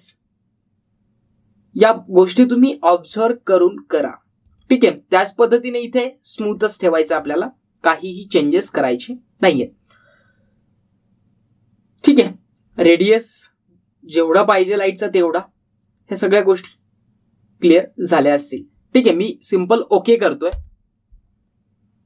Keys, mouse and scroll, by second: 5.4 click, 21.5 click.